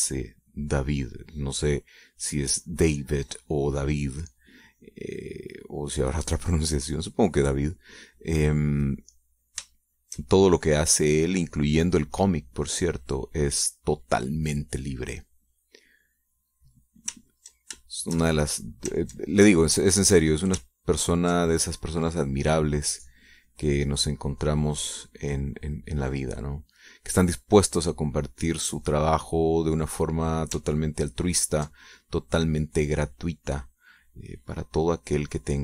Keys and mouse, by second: 4.7 click, 10.3 shift+click, 11.1-15.1 shift+drag, 15.3 click, 16.7-17.7 drag, 17.9 ctrl+click, 19.6 ctrl+click, 20.3 click, 21.3 ctrl+click, 22.4-27.3 ctrl+drag, 28.3-31.0 drag, 31.9 ctrl+click, 33.5-35.6 drag.